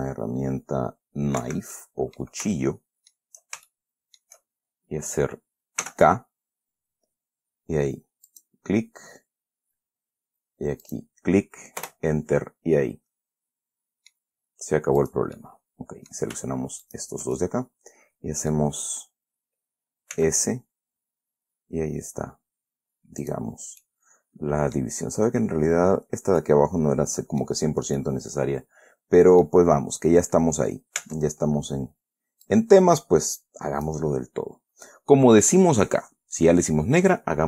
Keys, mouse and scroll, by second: 1.8 Escape, 2.1 middle click, 2.9 shift+middle click, 4.0 shift+middle click, 6.2 k, 8.6 click, 11.2 click, 12.2 Return, 12.8 scroll down 2, 13.1-14.7 middle drag, 14.7-15.3 scroll up 2, 15.3 click, 15.7 middle click, 17.2 shift+right click, 17.7-19.1 shift+middle drag, 20.5 s, 23.6 click, 23.9 scroll down 1, 24.2-25.3 middle drag, 26.7 scroll down 2, 26.7-28.0 middle drag, 28.0-28.6 scroll down 4, 28.3 middle click, 30.1 scroll up 2, 31.4 Tab, 32.8-34.4 drag.